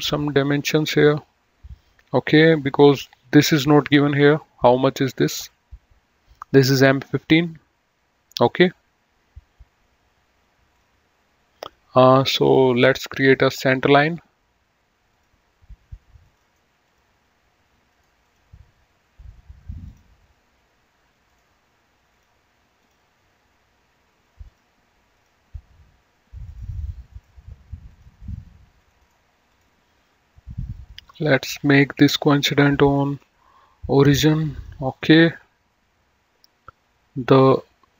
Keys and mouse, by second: 11.0 click, 13.2 click, 15.2 click, 16.4 click, 16.6 right click, 17.1 click, 17.9 right click, 18.4 click, 20.1 click, 21.4 click, 24.6 click, 26.5 click, 29.3 right click, 29.6 click, 31.0 click, 33.1 ctrl+click, 34.7 click.